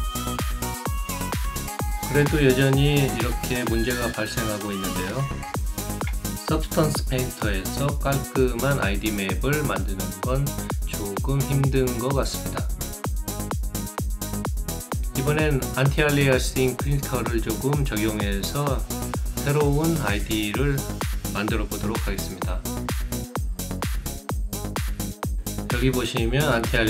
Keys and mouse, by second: 2.3 alt+middle click, 2.7 alt+right click, 6.6 alt+middle click, 7.2 alt+right click, 7.6 alt+click, 8.2 alt+shift+right click, 14.9 click, 16.8 click, 18.3 click, 21.6 click, 24.1-25.1 drag.